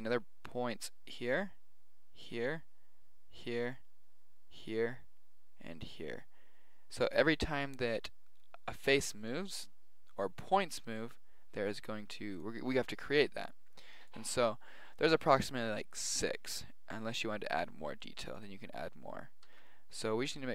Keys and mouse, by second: 15.3-17.1 drag, 18.3-20.1 drag, 19.4 ctrl+r.